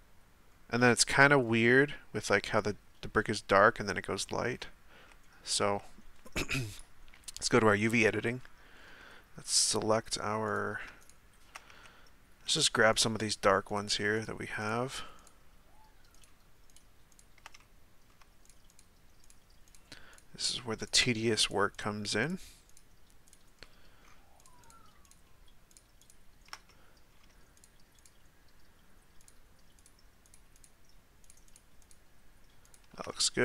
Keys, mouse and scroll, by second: 0.5-0.9 scroll up 2, 0.9-1.4 shift+middle drag, 1.4 scroll up 1, 4.2-4.9 scroll down 5, 4.9 z, 5.8 z, 7.4 click, 8.1-10.5 middle drag, 10.5-11.6 right drag, 11.6 z, 12.5-13.0 shift+right drag, 13.2 shift+right click, 13.7 shift+right click, 14.1 shift+right click, 14.6-15.2 shift+right drag, 16.1 shift+right click, 16.7 shift+right click, 17.1 shift+right click, 17.6-18.5 middle drag, 18.5 shift+right click, 19.3 shift+right click, 20.8-21.8 shift+right drag, 22.2 shift+right click, 22.7 shift+right click, 23.3-23.6 shift+right drag, 23.6-24.4 shift+middle drag, 24.4 shift+right click, 24.6 shift+right click, 25.1-26.1 shift+right drag, 26.7-27.6 middle drag, 27.6 shift+right drag, 28.0-29.3 shift+right drag, 29.8 shift+right click, 30.6 shift+right click, 31.2 shift+right click, 31.8 shift+right click, 32.7 shift+right click, 33.1-33.4 middle drag.